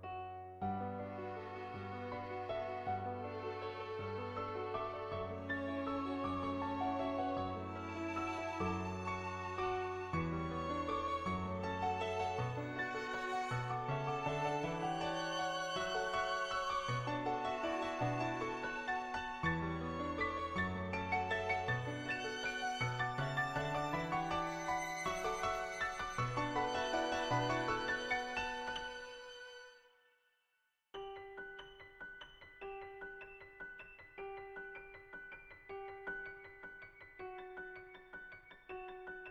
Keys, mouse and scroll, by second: 1.6 shift+click, 1.8 shift+middle click, 3.1 middle click, 3.6 shift+middle click, 4.5 middle click, 5.2 shift+middle click, 6.2 middle click, 7.0 shift+middle click, 7.6 click, 8.2 shift+click, 9.2 shift+click, 10.3 click, 11.2-13.2 shift+drag, 16.8 Tab, 17.9 click, 19.4 ctrl+z, 20.2-21.5 drag, 23.2 ctrl+z, 24.2 click, 26.5 ctrl+z, 29.6-37.1 drag, 37.5 shift+middle click, 38.1 middle click, 38.5 shift+middle click.